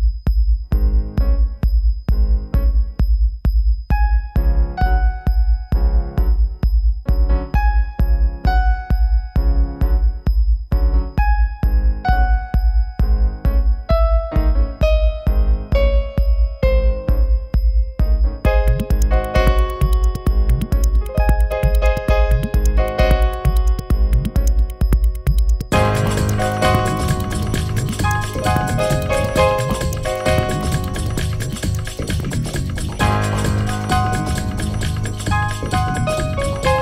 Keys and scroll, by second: 13.3 space, 22.5 r, 35.7 space.